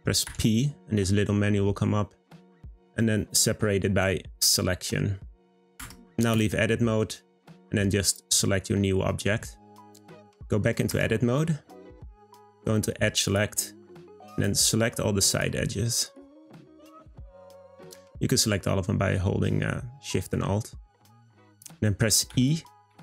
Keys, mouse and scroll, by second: 0.3 p, 5.8 Tab, 6.3 click, 8.0 click, 8.5-10.9 middle drag, 10.9 Tab, 11.7-13.3 middle drag, 13.3-14.4 drag, 15.3 alt+shift+click, 16.0 alt+shift+click, 17.5 alt+shift+click, 20.7-22.3 middle drag, 22.3 e.